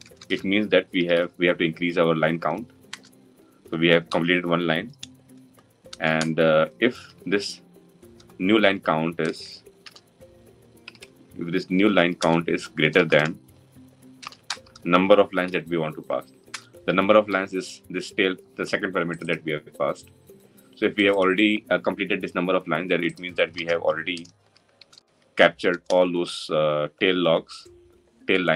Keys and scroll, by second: 2.7 Return, 12.0 Return, 16.3 Return.